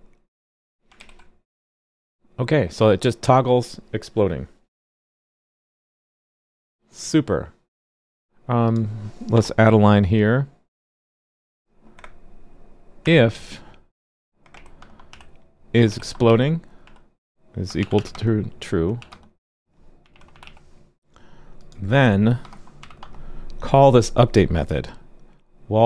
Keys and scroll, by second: 0.9 super+s.